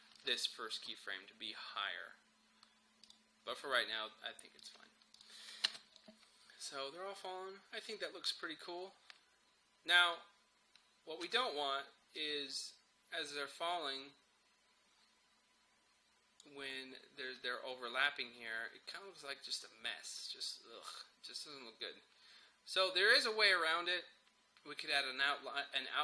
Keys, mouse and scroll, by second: 3.1 click, 5.7 space, 11.3 space, 12.2-19.0 drag.